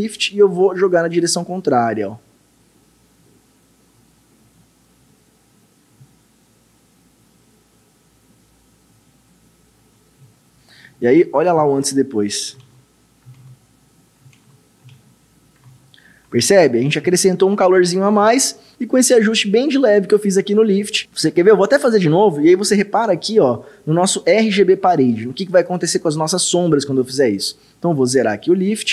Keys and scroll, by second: 12.6 ctrl+d, 14.4 ctrl+d, 14.9 ctrl+d.